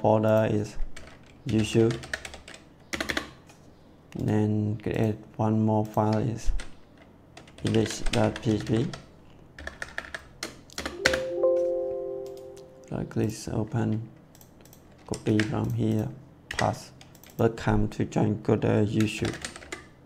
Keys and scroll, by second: 0.9-2.1 typing, 2.8 Return, 7.5-8.7 typing, 9.5 Delete, 10.6 Return, 14.9 ctrl+a, 15.2 ctrl+c, 16.4 ctrl+v, 19.1 shift+y, 19.3 o, 19.5 u, 19.5 t.